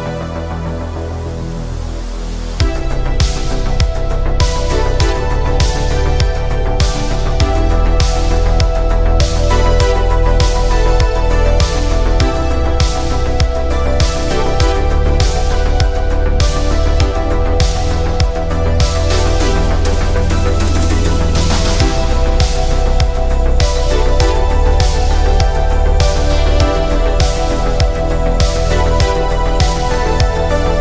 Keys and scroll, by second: 20.5 ctrl+z.